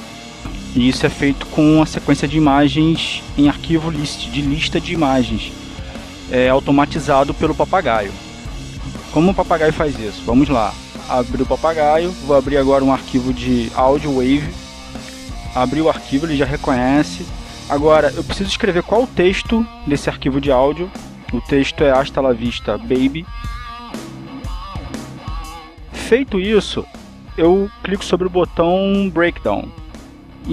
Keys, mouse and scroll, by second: 1.5 click, 5.8 click, 7.0-8.3 drag, 11.8 click, 14.4 click, 15.6 click, 17.0 click, 17.9-19.7 drag, 20.5 click, 21.3-26.1 typing.